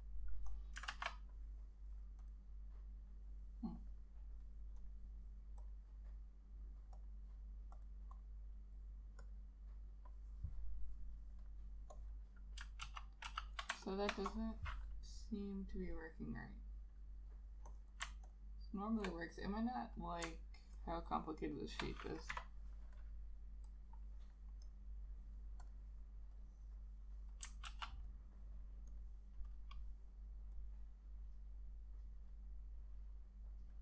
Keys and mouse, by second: 0.1 alt+click, 1.0 ctrl+a, 8.3 double click, 12.9 ctrl+z, 13.4 ctrl+z, 14.0 ctrl+click, 18.4 ctrl+click, 20.9 ctrl+click, 22.4 Delete, 27.8 ctrl+z.